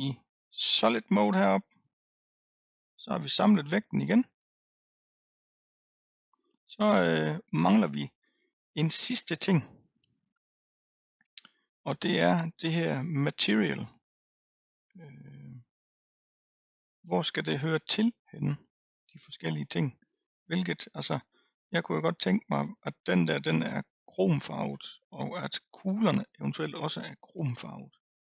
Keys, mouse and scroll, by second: 0.7 click, 2.4 click, 2.7-3.3 scroll up 3, 3.3-6.4 middle drag, 8.5-9.9 scroll up 2, 9.9-10.2 scroll down 1, 10.7 scroll down 1, 15.1-15.9 scroll down 2, 16.1-19.0 scroll up 1, 20.9-21.8 scroll up 3, 21.8 middle click, 22.2-24.7 scroll down 1, 24.7-28.2 middle drag.